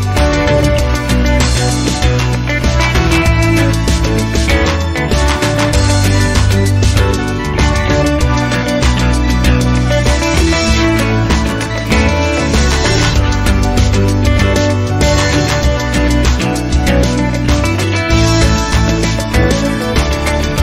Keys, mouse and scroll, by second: 0.7 0, 2.3 click, 3.2 ctrl+click, 3.8 ctrl+right click, 5.0 click, 6.5 click, 7.7 click, 11.3 middle click, 11.6-15.9 drag, 15.9 0, 17.5 scroll down 2, 19.1 click.